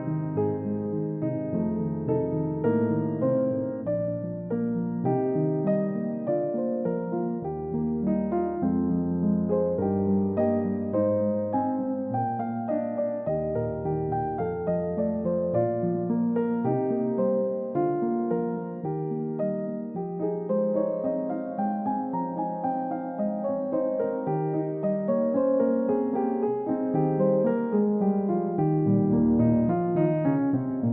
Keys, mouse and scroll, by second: 0.7 middle click, 2.0 scroll down 1, 2.2 middle click, 4.1-4.9 typing, 7.2 typing, 8.3-9.3 scroll up 1, 9.3 typing, 11.2-11.7 scroll down 1, 11.7 typing, 11.9-12.3 scroll down 1, 12.5 scroll up 1, 13.2 typing, 21.9-24.1 scroll down 1, 27.0-27.6 typing, 29.4 scroll down 1.